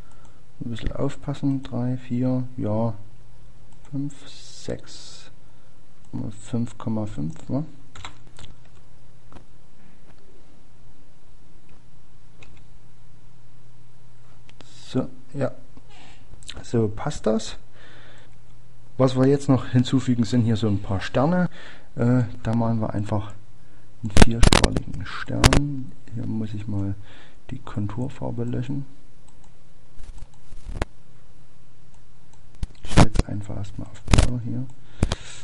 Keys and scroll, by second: 24.6 typing, 27.8 Return.